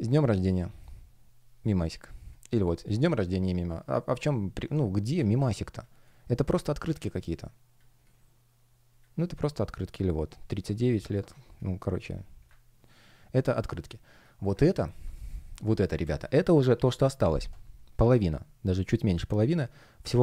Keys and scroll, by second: 5.3 space, 13.5 space, 14.5 super+space.